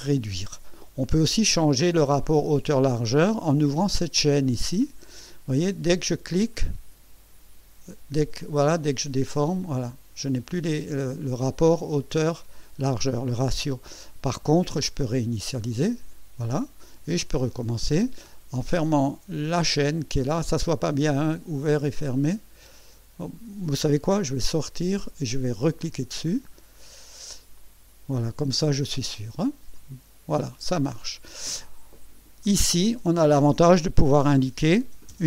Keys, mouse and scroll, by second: 4.8 click, 6.5-11.9 drag, 15.7 click, 19.4 click, 21.1 click, 22.1 click, 24.3 Escape, 26.1 click, 27.5 click, 29.7-31.5 drag, 32.4 click, 34.2 KP_6, 34.8 KP_0.